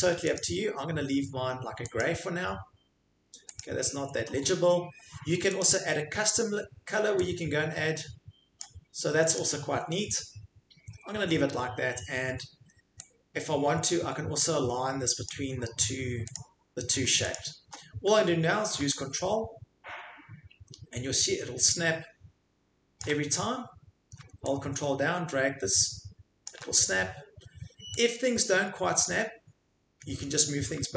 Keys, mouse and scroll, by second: 0.3 click, 2.0 click, 3.6 click, 5.6 click, 8.6 click, 9.3 click, 15.3 click, 16.3 click, 17.3 click, 23.0 ctrl+click, 26.4 ctrl+click, 29.0 click.